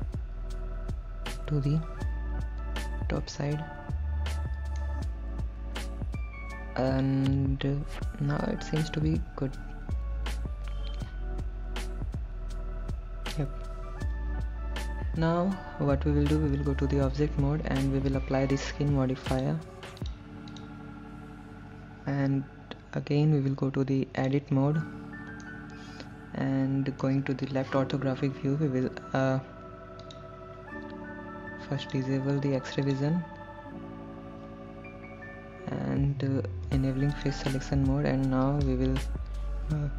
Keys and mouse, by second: 3.7-5.1 shift+middle drag, 16.9 Tab, 19.6 click, 24.5 click, 25.0 Tab, 25.7-27.3 middle drag, 27.9 KP_3, 30.3 click, 32.2 click, 33.1 click, 36.9 3.